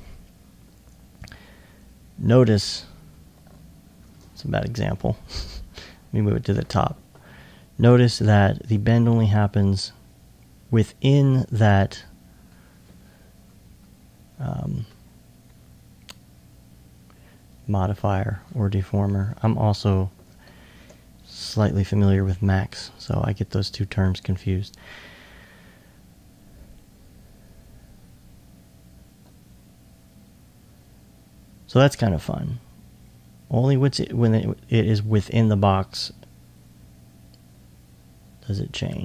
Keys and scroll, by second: 21.5 alt+1.